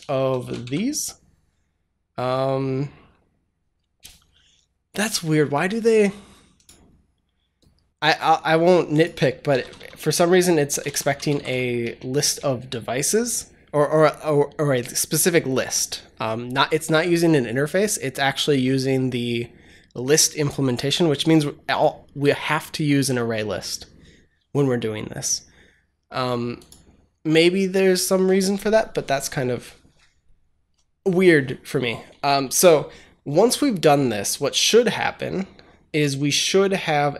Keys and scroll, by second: 0.0-1.0 typing, 9.1-12.1 typing.